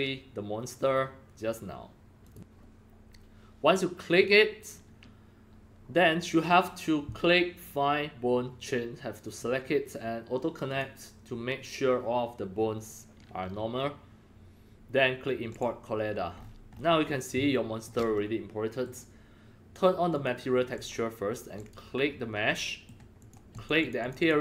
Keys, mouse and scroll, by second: 2.2 click, 4.0 click, 9.2 click, 10.6 click, 15.5 click, 16.3-16.9 scroll up 10, 18.4-18.8 middle drag, 20.0 click, 20.7 click, 21.5 click, 22.6 middle click, 23.2 click, 23.5 click, 23.8 click, 24.0 click, 24.2 click.